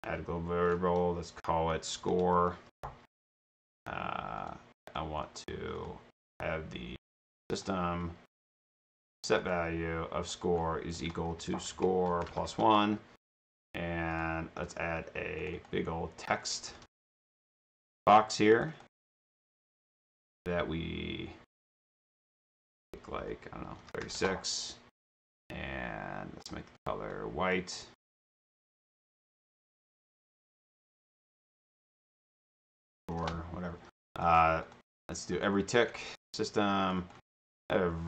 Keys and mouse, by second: 1.8-3.2 typing, 4.4 click, 5.8 click, 7.5 drag, 9.3 click, 10.3 click, 11.0-12.2 typing, 12.5 Return, 13.4 click, 14.1 click, 15.4 click, 15.7 click, 16.4-17.3 typing, 18.5 click, 22.3 click, 24.2 Return, 27.2 click, 28.3 click, 29.2 click, 31.8 click, 32.1 click, 32.5-33.6 typing, 34.2 click, 34.7 click, 35.4 click, 36.9 click, 37.0-38.0 typing, 37.0 click.